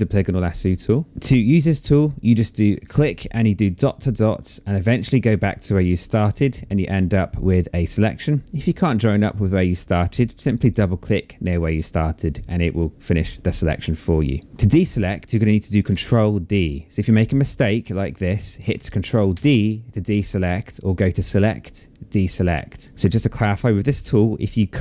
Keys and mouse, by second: 0.3 click, 2.4 click, 5.8 click, 10.1 click, 14.2 click, 14.5 Escape, 18.9 ctrl+d, 20.4 click, 22.4 click.